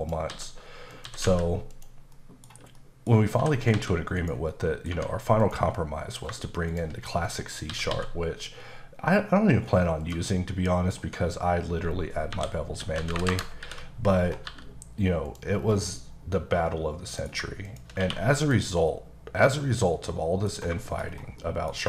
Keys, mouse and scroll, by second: 0.0-1.2 typing, 0.0 click, 0.9 click, 1.7 click, 2.1 middle click, 2.8 middle click, 3.4-3.7 typing, 4.2 click, 4.5 middle click, 4.9 Tab, 5.4 click, 5.7 middle click, 6.7 shift+click, 7.1 middle click, 7.7 typing, 10.0 click, 10.3 middle click, 11.0 Tab, 12.3-14.4 typing, 13.3 KP_Enter, 14.1-14.4 scroll up 2, 15.2 click, 15.6 scroll down 2, 16.2 middle click, 17.6 shift+click, 18.0 q, 18.4 click, 18.9 middle click, 20.5 scroll down 2, 20.8 shift+middle click, 21.1-21.4 scroll down 3, 21.4 middle click.